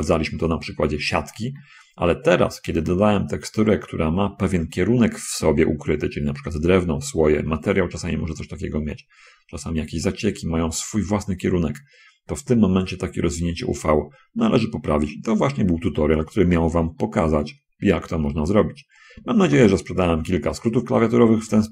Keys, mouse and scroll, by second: 1.6 shift+click, 1.8 shift+middle click, 2.3-5.2 shift+middle drag, 8.2 middle click, 9.2-10.8 middle drag, 12.1 scroll up 2, 12.8-15.9 middle drag, 16.5 shift+middle click, 17.2-18.2 shift+middle drag, 18.5 scroll up 1, 19.7 shift+space, 20.5-21.6 middle drag.